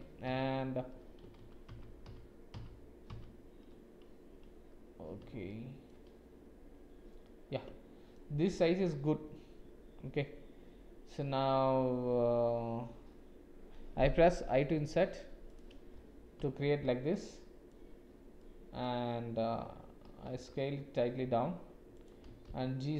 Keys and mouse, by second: 5.5 shift+click, 7.3 click, 14.5 i, 16.4 KP_Decimal, 17.1 click, 18.4 click, 20.2 s, 22.3 g.